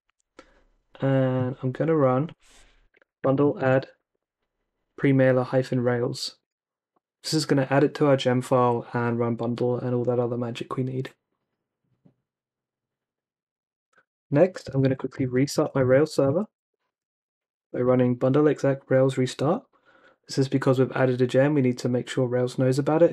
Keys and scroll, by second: 2.6-4.2 typing, 6.4 Return, 14.4-16.4 typing, 19.4 Return.